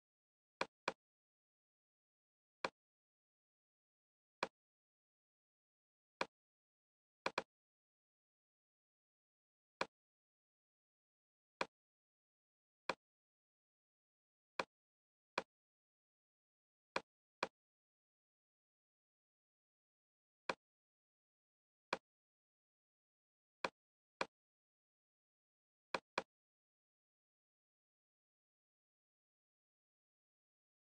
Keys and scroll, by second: 8.6 ⌅.